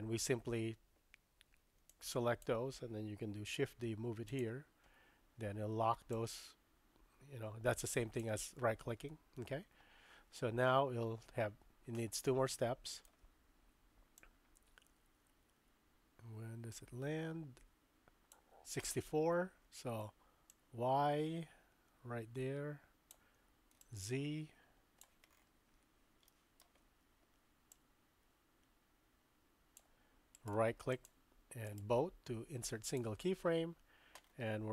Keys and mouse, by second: 1.9-2.4 drag, 3.4 shift+d, 6.1-8.2 drag, 12.3 shift+click, 14.2-18.6 drag, 20.5-23.1 drag, 23.9-25.1 drag, 26.3 shift+middle click, 27.7-29.8 drag, 30.4 right click, 31.8-33.0 right drag.